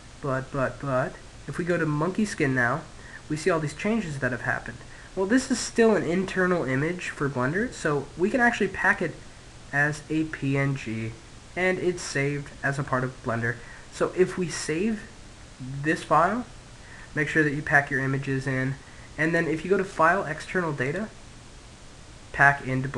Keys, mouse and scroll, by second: 0.3 click, 6.4 click, 11.0-12.8 middle drag, 17.9-21.5 drag.